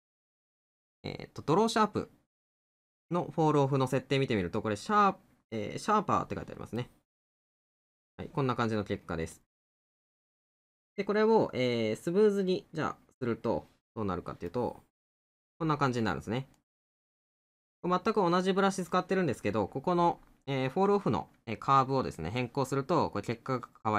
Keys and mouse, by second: 13.8 middle click, 16.6 middle click, 18.4 middle click, 22.7 middle click.